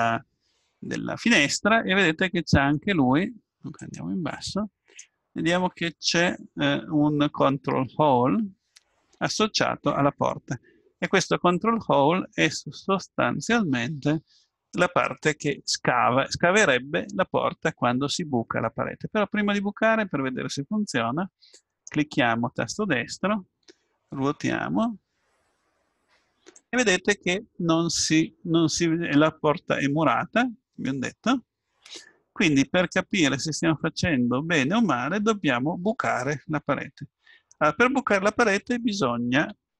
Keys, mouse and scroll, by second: 18.6-20.5 middle drag, 21.7 right click, 24.6 r, 29.9-31.5 middle drag, 32.5-34.0 middle drag, 37.3-39.7 middle drag.